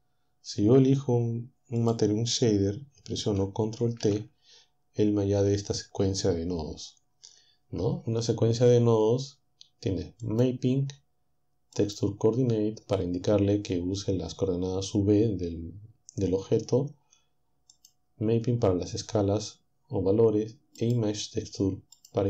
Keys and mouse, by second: 1.8-3.4 drag, 4.0 ctrl+t, 10.3 click, 11.8-13.7 drag, 17.7 click, 20.8 click, 22.0-22.2 drag.